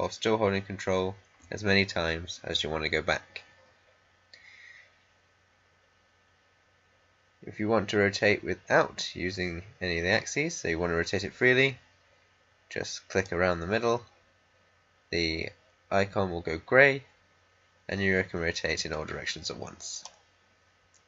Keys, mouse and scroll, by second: 13.1-21.0 drag.